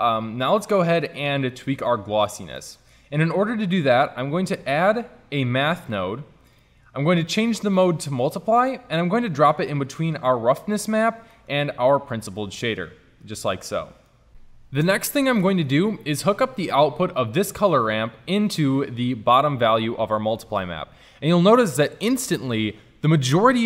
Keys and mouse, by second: 4.4 shift+a, 8.9 click, 9.4-11.4 middle drag, 12.2-13.4 drag, 13.5 click, 17.2-18.8 drag.